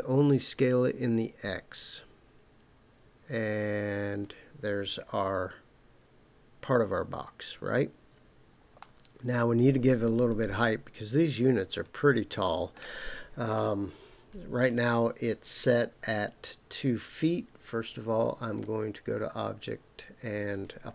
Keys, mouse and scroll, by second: 4.1 click, 8.8-12.8 middle drag, 18.5-20.6 drag.